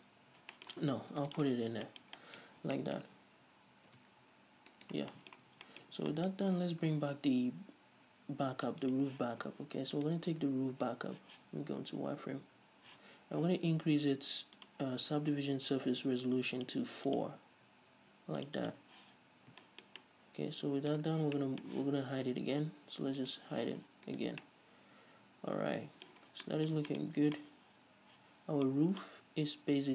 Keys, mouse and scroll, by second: 0.0 scroll down 2, 0.6 scroll up 2, 1.3 ctrl+r, 1.8 click, 1.9 scroll up 2, 2.2-9.2 shift+middle drag, 2.7-3.1 scroll up 2, 4.0 alt+s, 5.2 shift+right click, 5.3 scroll down 2, 5.7 a, 6.2 Tab, 9.2-10.3 drag, 10.3 right click, 11.7 z, 14.9-15.4 drag, 15.6-16.0 scroll down 2, 16.9-17.9 drag, 18.7-20.0 drag, 20.0-23.5 shift+middle drag, 23.5 click, 24.4 right click, 24.7-29.9 middle drag, 26.6 scroll down 2, 27.4 scroll up 1, 27.4 a, 29.0-29.4 scroll up 1.